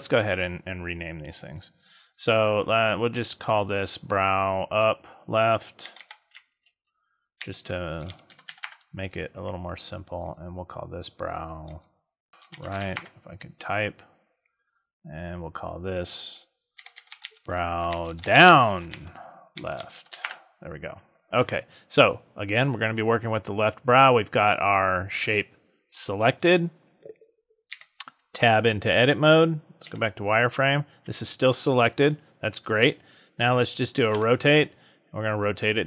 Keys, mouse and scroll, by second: 0.9 click, 1.5 click, 2.3 click, 10.2 click, 11.0 click, 12.3 BackSpace, 14.4 click, 15.2 click, 24.6 click, 27.1 click, 27.7 Tab, 29.8 z, 34.1 r.